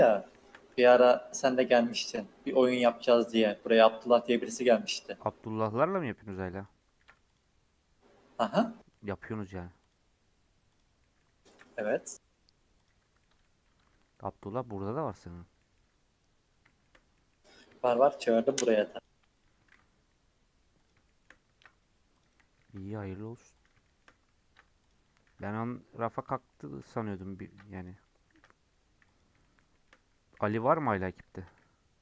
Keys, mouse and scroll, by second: 0.3 shift+Tab, 0.7 g, 2.7 ctrl+r, 4.3 ctrl+r, 7.0 ctrl+r, 8.6 middle click, 9.3 ctrl+r, 11.0 middle click, 11.5 ctrl+r, 13.0 Tab, 13.1 scroll up 1, 13.1 middle click, 13.9 Tab, 14.1-15.2 middle drag, 15.2-15.5 scroll down 3, 15.5 middle click, 16.2-16.6 scroll up 4, 16.6 shift+middle click, 16.9 scroll down 4, 17.1 middle click, 17.4-17.7 scroll up 3, 17.7 shift+middle click, 18.6 ctrl+r, 19.7 ctrl+b, 21.0 shift+middle click, 21.5 ctrl+r, 22.6 ctrl+b, 23.8 shift+middle click, 24.4 ctrl+r, 25.2 ctrl+b, 26.3-27.4 shift+middle drag, 27.4 ctrl+r, 28.3 ctrl+b, 29.4-30.6 shift+middle drag, 30.6 ctrl+r, 31.3 ctrl+b.